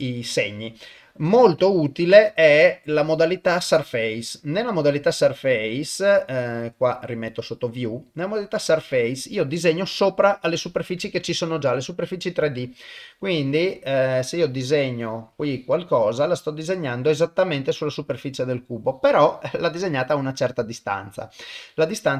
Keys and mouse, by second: 1.2 middle click, 2.5-9.5 drag, 11.4 ctrl+middle click, 11.8 middle click, 12.5 ctrl+middle click, 13.4 middle click, 14.4-16.5 drag, 16.7-18.8 middle drag, 20.2-21.6 middle drag.